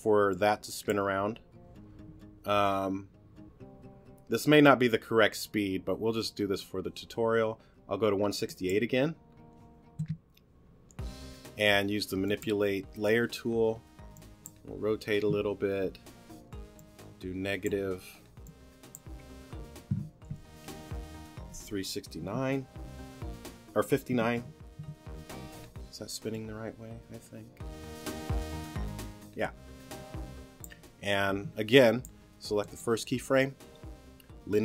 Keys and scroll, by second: 22.2 3, 24.1 5.